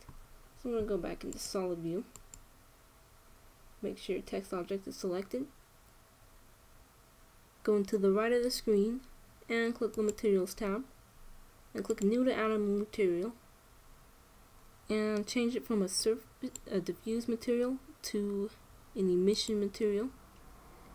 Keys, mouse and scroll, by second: 2.1-3.9 drag, 9.5-10.7 middle drag, 10.7-12.3 drag, 12.5-14.3 drag, 14.4-20.2 drag.